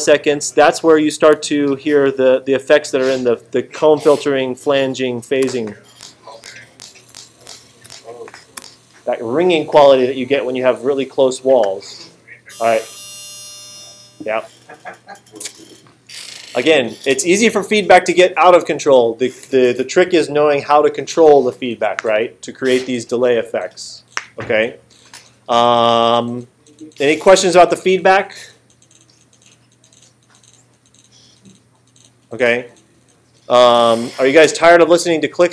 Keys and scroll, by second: 5.4 space.